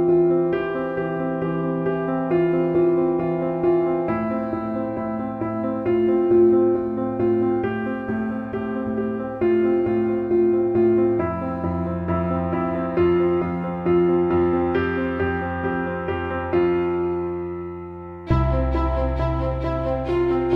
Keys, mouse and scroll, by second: 0.2-3.6 drag, 7.7 click, 11.0 click, 13.3 click, 19.7 typing.